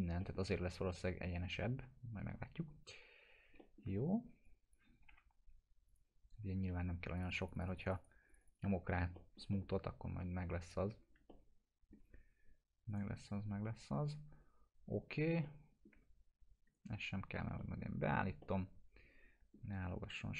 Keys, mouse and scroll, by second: 0.2 middle click, 0.4 scroll down 1, 2.7 scroll up 1, 3.6 alt+middle click, 4.4 click, 5.1 F4, 5.9 click, 9.2 alt+middle click, 10.6 click, 11.3-12.9 middle drag, 12.9 click, 15.4-16.0 alt+middle click, 16.7 right click, 17.6 middle click, 18.4-19.6 alt+middle drag.